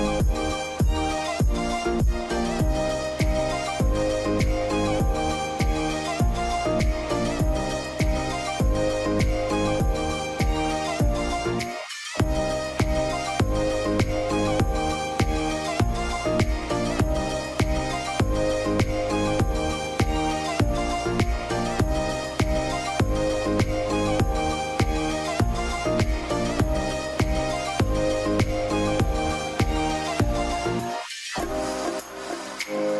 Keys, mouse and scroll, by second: 28.3 ctrl+z, 28.5 ctrl+0.